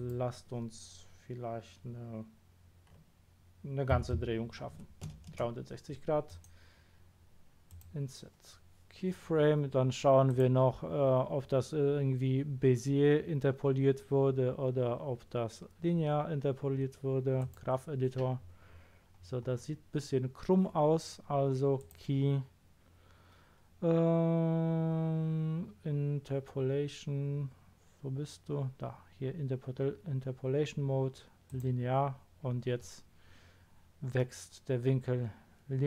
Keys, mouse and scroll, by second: 3.9 KP_3, 4.1 KP_6, 4.7 KP_0, 5.3 Return, 6.3 right click, 7.7 click, 10.3 click, 17.3 click, 18.6-19.1 scroll down 2, 19.2 scroll down 2, 19.3 scroll up 2, 20.2 scroll up 2, 21.7 click, 31.5 click.